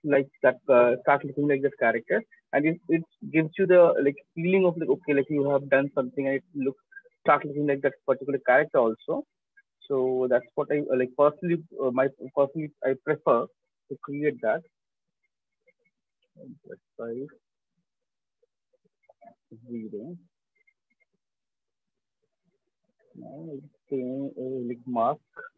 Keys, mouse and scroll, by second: 9.4 right click, 10.0 alt+click, 12.2-19.8 typing, 15.3-16.7 alt+drag, 18.0 click, 18.8 Return, 22.2 right click, 22.9 Return, 23.0-23.6 right drag, 23.6 click, 23.6 ], 23.8 ], 23.9 ].